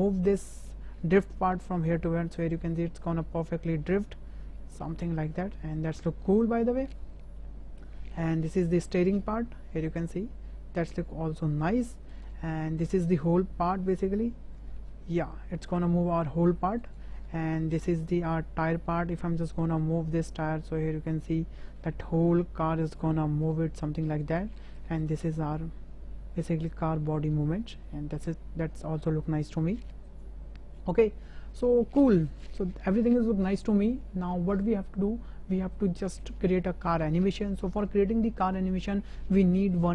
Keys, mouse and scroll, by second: 2.0 g, 7.4 click, 7.5-7.8 middle drag, 8.0 middle drag, 8.3 middle click, 8.8 click, 9.8 g, 12.5 middle drag, 13.3 click, 14.8 g, 18.5-19.1 middle drag, 19.8 g, 25.0 click, 25.5 g.